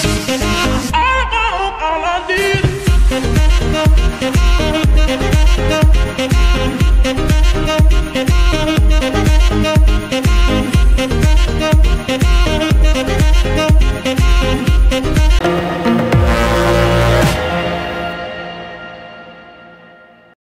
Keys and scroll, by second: 6.6 space, 9.2 n.